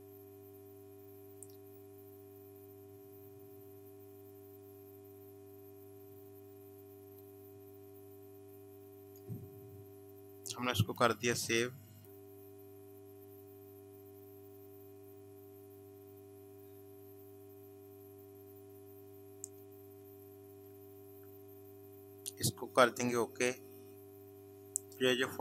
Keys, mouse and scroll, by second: 9.1 click, 23.5 click.